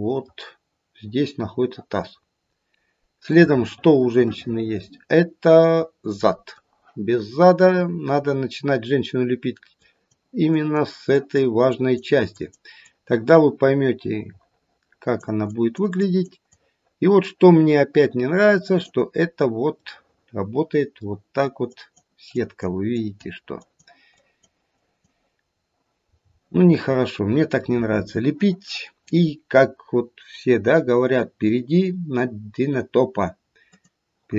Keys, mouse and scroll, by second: 2.4 scroll down 1, 3.7 middle click, 4.4 middle click, 9.8 click, 10.5 click, 11.1 click, 11.6 click, 12.2 click, 12.8 click, 15.5 click, 16.0 click, 16.4 click, 19.1-19.5 scroll up 2, 19.9 middle click, 20.4 middle click, 21.7 click, 22.2 click, 22.9 click, 23.6 click, 24.2 click, 25.4-27.7 scroll down 3, 26.4 middle click, 33.6 click.